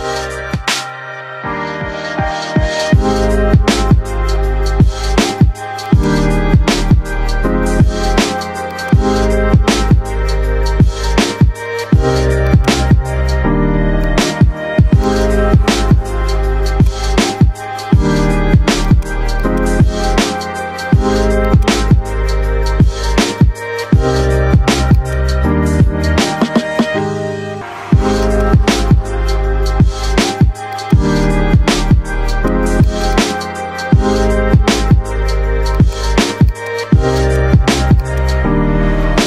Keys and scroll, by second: 0.5-3.7 typing, 4.2 Return, 9.4 BackSpace, 9.6 e, 19.7 shift+F2, 20.1 Escape, 22.7 ctrl+Page_Down, 33.6-35.0 typing.